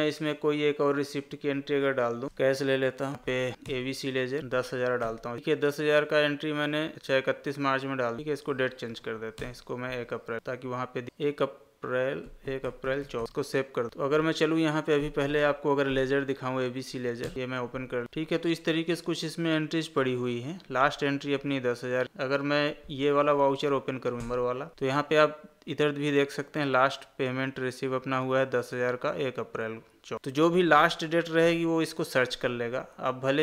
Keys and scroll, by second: 3.1 space, 3.4 Down, 6.9 Escape, 8.8 Down, 13.2 ctrl+a, 13.9 Escape, 30.5 Escape.